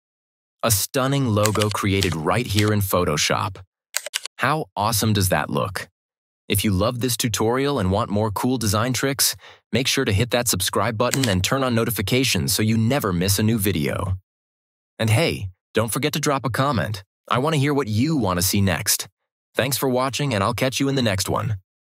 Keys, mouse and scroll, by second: 1.3 click, 1.5 ctrl+-, 1.9 ctrl+=, 4.1 ctrl+-, 11.0 ctrl+-, 11.1 ctrl+=.